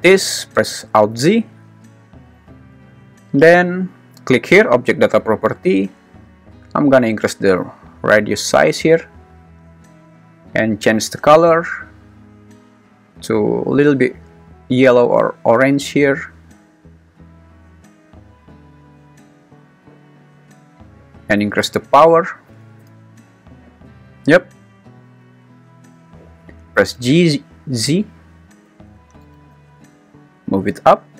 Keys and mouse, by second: 1.1 alt+z, 1.5 `, 7.7-9.9 drag, 21.8 click, 22.6 0, 25.3 `, 25.9 `, 26.9 g, 27.8 s, 28.6 Escape, 29.2 g, 29.5 z.